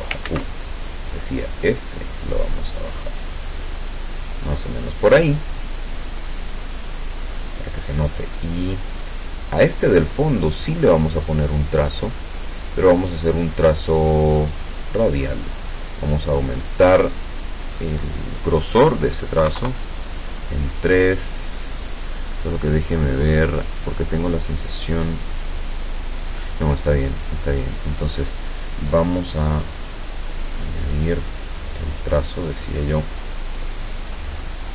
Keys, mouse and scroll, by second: 0.3 ctrl+z, 1.3-4.1 drag, 8.4 click, 9.1 click, 10.7 click, 14.7 click, 15.8 click, 19.4 KP_3, 19.6 KP_Enter, 22.6 click, 30.5 click.